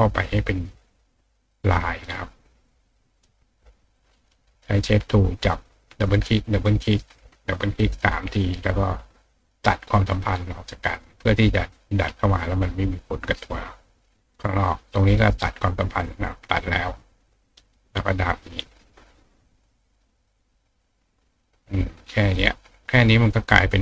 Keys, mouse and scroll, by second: 1.2 click, 3.1 click, 4.4 click, 5.7 click, 5.9 click, 6.8 click, 7.1 click, 7.7 click, 7.9 click, 8.4 click, 10.6 click, 10.9 click, 11.9-12.9 drag, 17.0-18.6 drag, 19.9-21.4 drag, 22.0 click, 23.5 click.